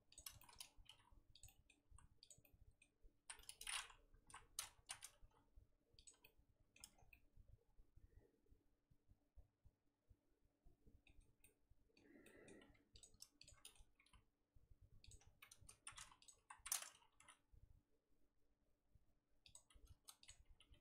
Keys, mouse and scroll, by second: 0.1 shift+click, 0.3 z, 0.8 g, 1.4 middle click, 1.9 z, 2.3 click, 2.4 middle click, 3.2 z, 3.4 middle click, 3.7-4.2 scroll up 1, 4.2 KP_1, 4.8 z, 5.2 g, 6.2 middle click, 6.8 Tab, 6.9 scroll down 4, 7.1-10.1 middle drag, 11.4 middle click, 12.1 Tab, 12.2 middle click, 12.5-13.0 scroll up 2, 13.0 click, 13.4 shift+click, 13.7 middle click, 13.9 g, 15.4 middle click, 16.2 click, 16.4 KP_1, 17.1 g, 20.3 click, 20.4 g.